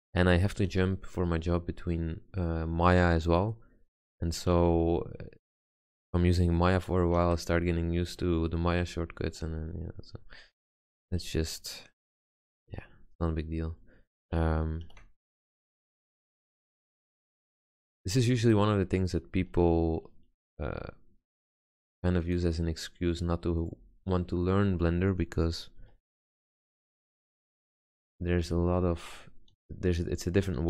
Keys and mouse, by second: 0.1 a, 0.8 b, 1.6 g, 3.3 click, 4.2 a, 4.7 b, 6.7 click, 7.4 ctrl+z, 8.1 a, 9.0 b, 9.6 g, 11.0 a, 11.5 b, 12.2 g, 15.0 ctrl+r, 18.0 ctrl+z, 18.6 ctrl+r, 26.0 a, 26.7 b, 27.3 g, 28.6 a, 29.7 b.